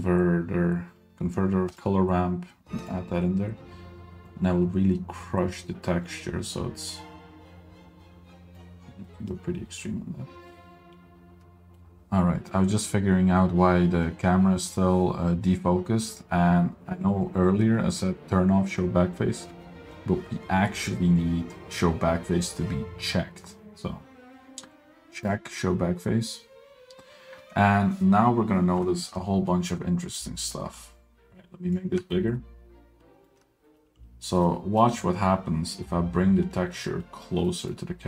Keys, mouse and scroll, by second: 4.4-8.7 drag, 9.2-11.7 middle drag, 11.9-12.5 middle drag, 11.9 click, 25.4 click, 30.5-32.0 drag, 32.6 ctrl+middle click, 33.8 middle drag, 34.6 middle click, 35.8 middle click, 36.9 middle click, 37.4 g.